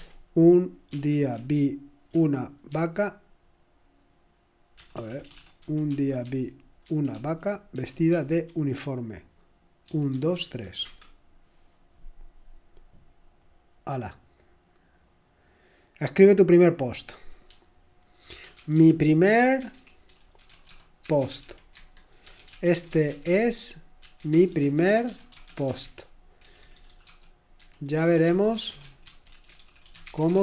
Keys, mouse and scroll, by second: 0.0-2.7 typing, 4.8-10.9 typing, 13.5 typing, 18.1-30.4 typing.